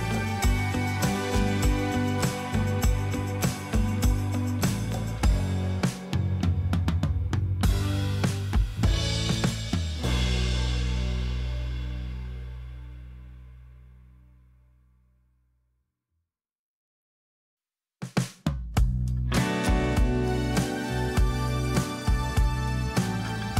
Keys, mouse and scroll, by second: 13.4 ctrl+i.